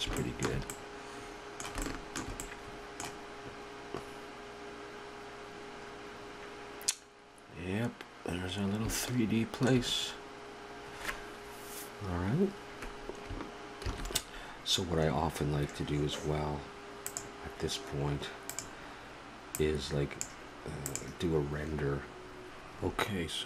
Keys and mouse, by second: 1.5 middle click, 2.1 middle click, 9.8-10.8 middle drag, 13.9 shift+z, 17.1-19.7 drag, 20.9-22.5 drag.